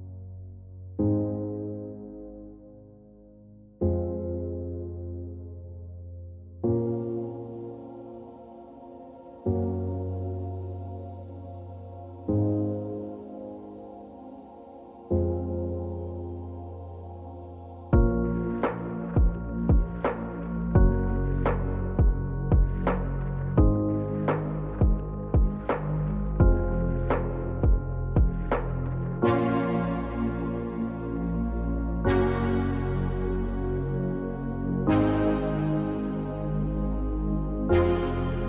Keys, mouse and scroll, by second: 0.8 click, 0.9 click, 1.4 shift+click, 6.9 click, 9.5 click, 14.2-24.2 drag, 26.0 click, 32.1 right click, 34.3-38.4 drag.